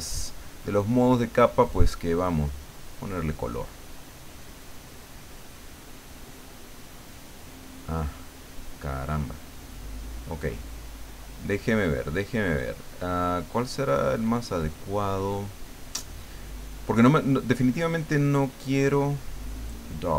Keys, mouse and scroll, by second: 2.7 click, 3.5 click, 4.9-6.7 drag, 6.8 click, 9.4 click, 18.9 click, 19.6-20.1 drag.